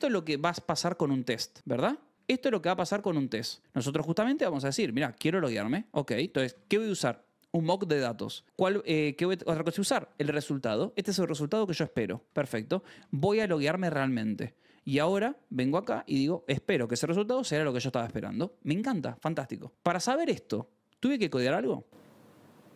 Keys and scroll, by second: 0.0-0.8 typing, 1.6 Escape, 2.1 k, 3.3 Escape, 4.4 k, 4.9 shift+v, 5.6 Escape, 5.9 j, 6.4 shift+v, 10.9 shift+v, 12.2 Escape, 12.5 j, 12.9 shift+v, 14.7 Escape, 15.1 j, 15.7 shift+v, 18.2 Escape.